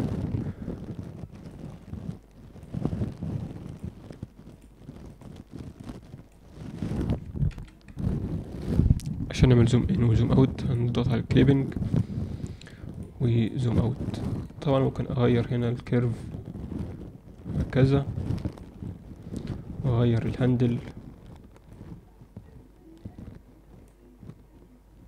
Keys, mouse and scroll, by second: 1.4-2.6 drag, 3.6 click, 5.1 click, 5.9 click, 7.4 ctrl+F9, 10.6 click, 11.8 click, 12.9 click, 13.3 click, 14.3 click, 14.9 click, 17.5-18.5 drag, 19.4 click, 21.7-23.8 drag.